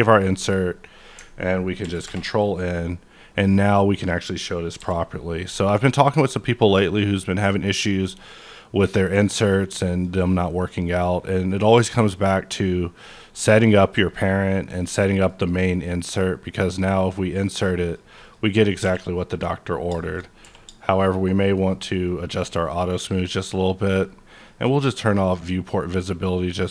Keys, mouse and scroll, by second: 2.0 Return, 2.0 ctrl+n, 3.6-4.1 scroll up 1, 4.1-6.0 middle drag, 4.8 n, 6.0 click, 6.9 click, 7.7 click, 9.0 click, 9.9 click, 11.6 click, 12.1 click, 14.0 click, 14.8-17.8 middle drag, 16.7 click, 17.8 click, 18.2 click, 18.8 q, 19.1 click, 19.7 scroll down 1, 20.0 shift+middle click, 20.1-20.6 shift+scroll up 3, 20.4 q, 20.9 click, 21.3-21.6 scroll down 1, 21.7 click, 22.0-24.3 middle drag, 23.9 click, 24.3 click, 25.0 click, 25.8-26.7 scroll up 2.